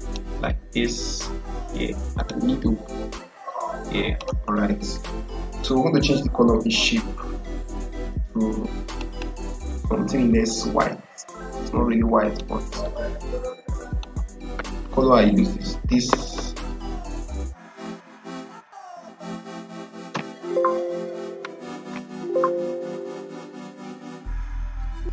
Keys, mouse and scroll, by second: 2.3-6.5 drag, 8.8 click, 11.5-15.3 drag, 15.3 ctrl+a, 16.1-20.5 typing, 21.8 h, 24.7-25.0 typing.